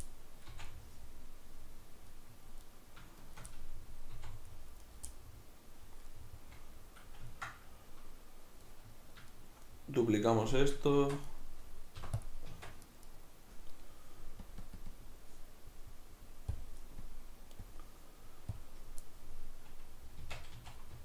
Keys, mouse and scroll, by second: 0.0-2.7 middle drag, 0.5 c, 3.2 shift+right click, 3.5-4.1 middle drag, 4.1 c, 4.9 right click, 5.1-12.0 middle drag, 11.0 shift+d, 11.4 right click, 12.0 p, 12.5 Tab, 12.9 right click, 13.1-14.5 right drag, 14.5-19.3 drag, 19.3-21.0 middle drag, 20.3 Tab, 20.5 a.